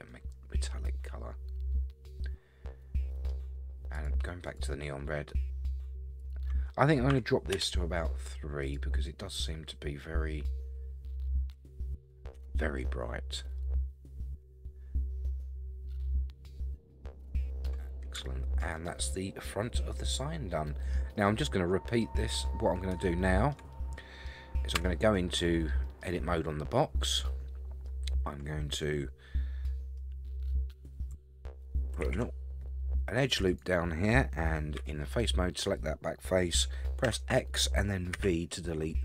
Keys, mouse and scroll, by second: 0.1-3.3 middle drag, 0.1 scroll down 1, 3.9 click, 4.5 click, 6.2-7.8 drag, 8.6 click, 10.4-11.6 scroll up 3, 12.4 Tab, 13.3 scroll down 1, 13.6-17.6 middle drag, 17.8-18.2 scroll down 4, 18.2-18.6 shift+middle drag, 18.8-20.9 middle drag, 21.2-22.0 middle drag, 23.0-23.5 shift+middle drag, 23.7-24.3 middle drag, 24.7 Tab, 25.8 middle click, 27.1 middle click, 28.8-30.0 middle drag, 32.3 ctrl+r, 34.8 3, 35.2 click, 37.0 x, 38.9-39.0 middle drag.